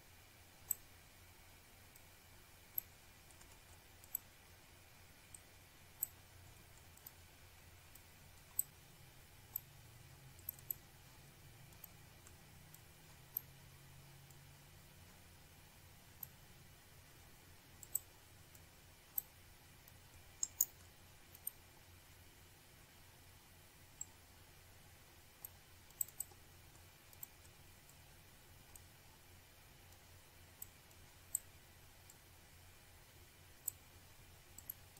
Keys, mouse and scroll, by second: 0.6 click, 1.3 shift+click, 2.3 Delete, 3.3 click, 3.9 click, 5.2 click, 8.6 click, 11.6 click, 13.1 click, 14.3 click, 16.3 click, 16.5 click, 16.6 double click, 17.6 shift+click, 18.6 click, 20.0 click, 22.4-23.2 scroll down 1, 23.4 click, 24.1 click, 25.4 click, 25.9 shift+right click, 26.7 click, 27.4 scroll up 1, 29.3 click, 31.1 click, 31.4 double click, 31.7 scroll down 1, 32.3 shift+click.